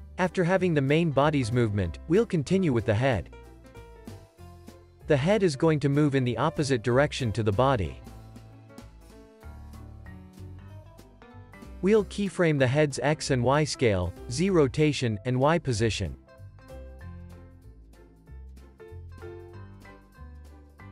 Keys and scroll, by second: 7.0 Tab.